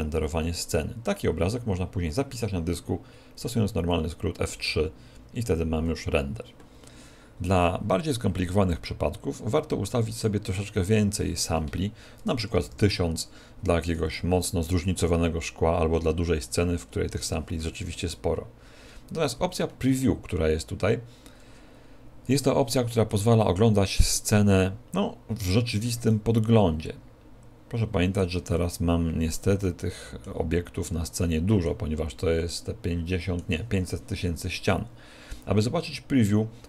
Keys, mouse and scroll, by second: 24.3 middle click, 26.3 middle click, 28.7 middle click, 29.8 middle click, 32.7 middle click.